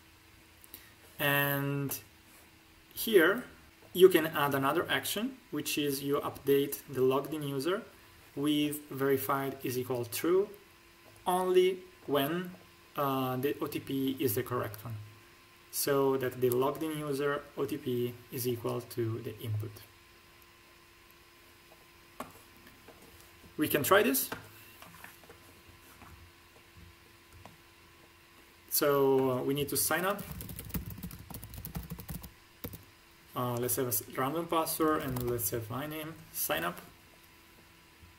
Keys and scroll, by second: 30.1-32.0 typing, 31.1 ctrl+alt+`, 32.5 Tab, 34.8 shift+p, 34.9 a, 35.1 l, 35.2 o.